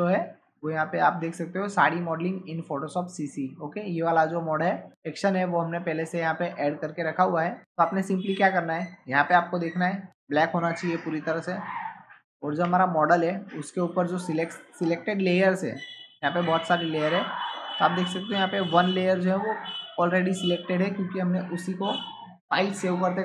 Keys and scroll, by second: 12.5 ctrl+Tab.